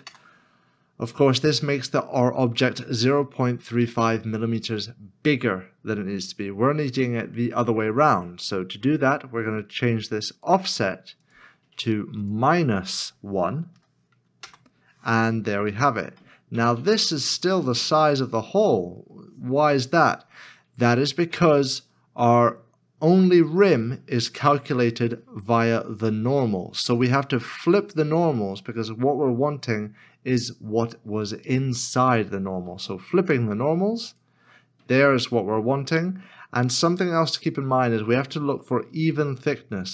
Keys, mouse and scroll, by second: 0.0 Return, 13.7 Return, 14.4 -, 14.5 Return, 16.2 middle click.